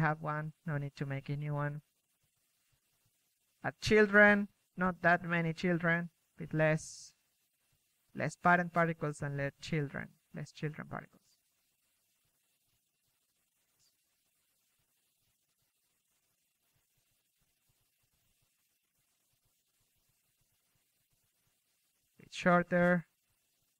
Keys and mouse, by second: 2.9-6.7 middle drag, 5.2 a, 5.8 a, 8.2 middle click, 9.2 click, 10.1 click, 15.2-18.7 drag, 17.7 ctrl+c, 18.0 ctrl+v, 18.5 KP_1, 19.5 KP_3, 23.0-23.7 typing.